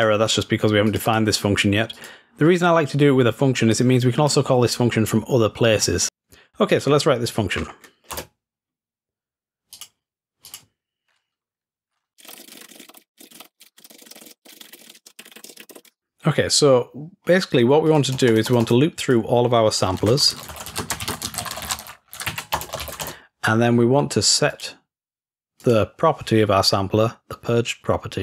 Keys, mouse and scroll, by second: 0.0 click, 0.9 click, 1.1 click, 2.0 click, 3.8 click, 6.7-9.3 drag, 9.8-12.4 drag, 12.6 click, 16.3-17.9 scroll down 2, 17.9-18.9 drag, 19.1-20.1 drag, 24.5-25.8 drag.